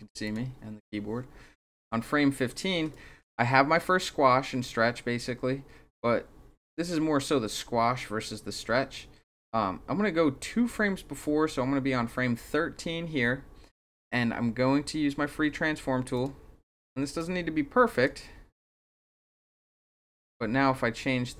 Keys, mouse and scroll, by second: 0.2 click, 2.9-5.4 drag, 9.9-11.2 drag, 16.1 click, 17.2 click, 19.0-21.3 drag.